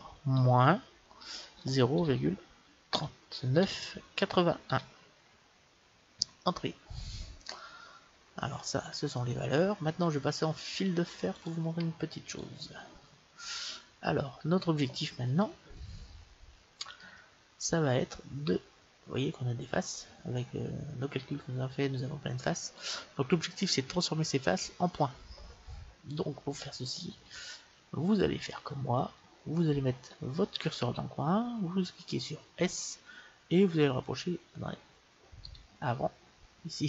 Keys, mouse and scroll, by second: 11.3-13.0 drag, 14.1-20.8 middle drag, 22.4 middle click, 26.9-28.1 middle drag, 32.5 s.